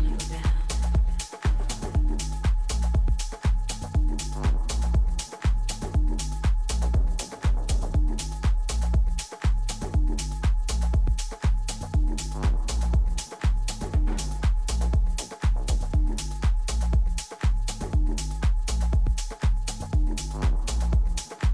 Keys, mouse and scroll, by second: 0.2 a, 0.6 Tab, 2.5 Tab, 3.2 z, 3.9 Tab, 6.4-9.0 typing, 10.2 Tab, 12.1 Tab, 12.7 Tab, 13.5 a, 14.1 Tab, 14.6 middle click, 15.1 Tab, 15.5 a, 16.2 a, 16.5 a, 19.1 Tab, 20.4-21.5 right drag.